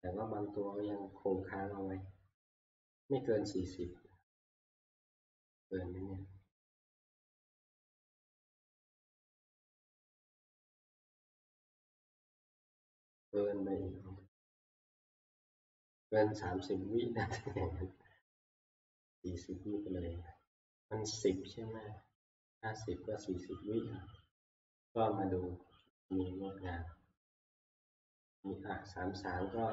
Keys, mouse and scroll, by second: 23.4-29.7 drag.